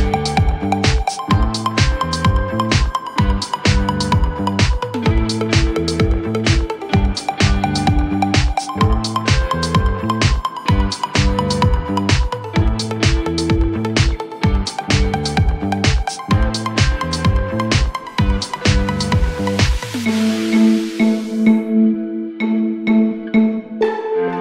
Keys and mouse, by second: 0.0-1.9 alt+drag, 2.4 alt+middle click, 3.4-6.1 alt+drag, 6.4 alt+click, 7.0 alt+click, 9.9 4, 10.4 click, 11.0 click, 11.3 middle click, 11.7 click, 12.2 alt+middle click, 12.5 alt+click, 13.6 click, 14.2-15.2 drag, 16.3-18.7 drag, 20.3 alt+middle click, 20.8 alt+middle click, 21.6 alt+middle click, 22.1 click.